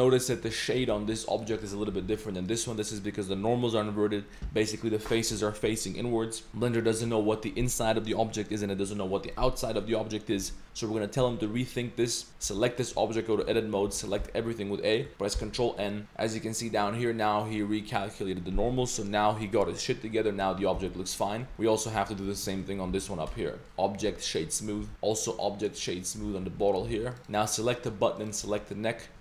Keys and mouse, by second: 0.0 shift+middle click, 0.2 shift+middle drag, 0.6 middle click, 1.0 g, 1.6 click, 1.9 g, 2.5 click, 12.5 g, 13.4 Tab, 13.9 a, 14.2 a, 15.4 ctrl+n, 16.0 ctrl+b, 16.0 ctrl+n, 19.8 middle drag, 20.5 Tab, 20.7 g, 21.3 middle click, 21.7 middle click, 22.0 Tab, 22.2 a, 22.9 ctrl+n, 23.3 Tab, 23.5 middle click, 23.6-24.4 drag, 23.6 a, 24.8 a, 24.9 ctrl+z, 25.2 click, 26.5 z, 26.6 drag, 26.9 g, 27.2 ctrl+s, 27.2 click, 27.4-27.7 middle drag, 28.2 shift+click.